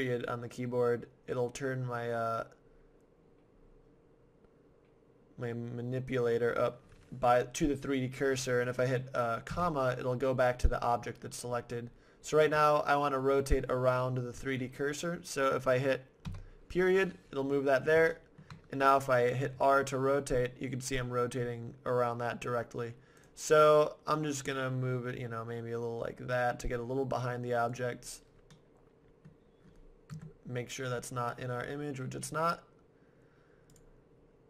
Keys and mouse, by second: 7.1-9.5 middle drag, 9.5 ,, 16.2 ., 17.8-20.0 middle drag, 19.6 r, 23.3-25.1 right drag, 24.3 r, 27.9-30.1 middle drag, 30.1 KP_0.